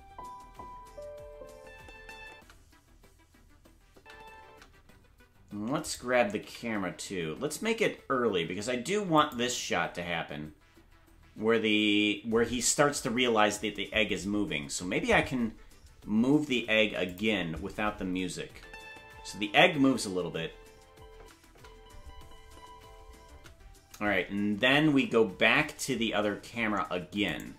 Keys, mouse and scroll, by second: 5.8 right click, 5.8 space, 6.4 g, 17.1 click, 18.5 space, 22.4-23.3 scroll down 1, 22.4 space, 23.3-26.5 scroll down 4, 23.3 space, 27.3 right click.